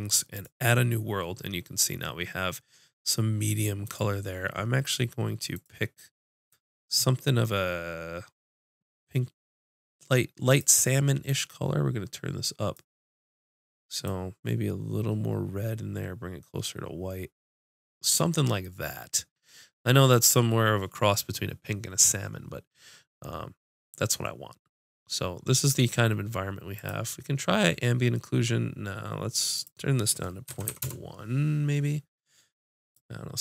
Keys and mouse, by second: 6.7 click, 26.7-28.6 drag, 29.5 click, 29.6 right click, 29.7-31.3 drag, 33.1-33.4 drag.